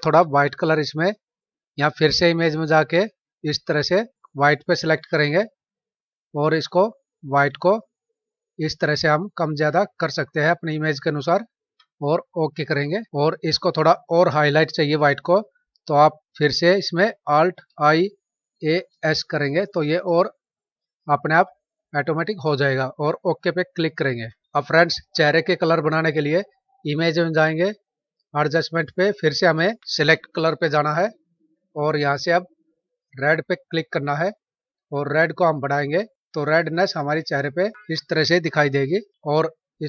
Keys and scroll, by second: 17.5 alt+i, 18.3 alt+a, 18.7 alt+s.